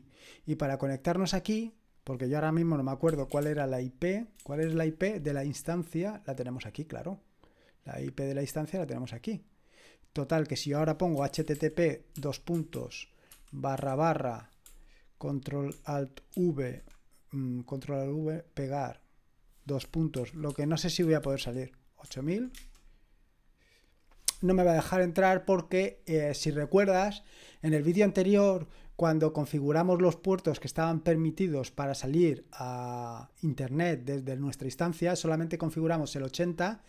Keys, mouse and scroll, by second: 1.9 click, 2.8-4.6 typing, 6.5 click, 8.6-11.2 drag, 10.9-13.8 typing, 16.4 ctrl+alt+v, 18.5 click, 20.0-21.9 typing, 22.5 Return.